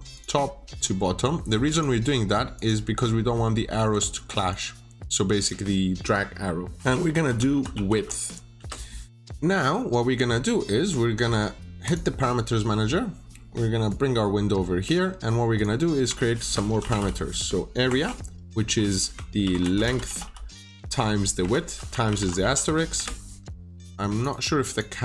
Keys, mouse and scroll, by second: 6.8-8.5 typing, 8.5 Return, 8.5 Return, 8.5 Delete, 9.6 scroll down 1, 10.0 middle click, 11.7 click, 16.0-22.9 typing, 24.0 click, 24.2 double click.